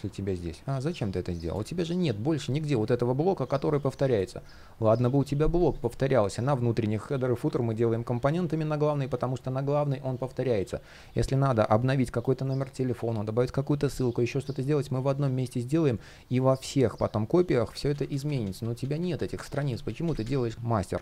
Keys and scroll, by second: 2.1 shift+p, 17.6 super+z.